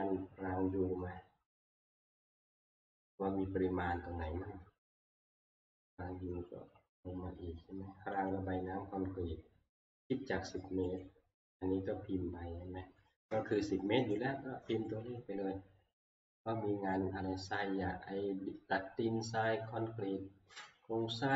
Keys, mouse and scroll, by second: 5.4-6.0 scroll, 6.5 scroll, 8.3 click, 8.8-9.2 scroll, 11.0 click.